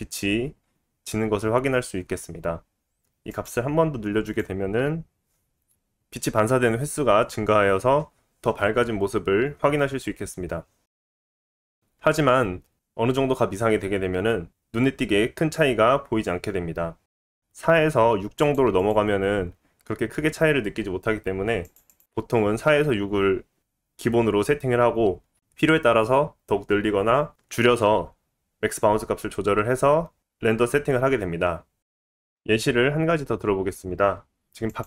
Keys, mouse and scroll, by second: 33.6-34.8 middle drag.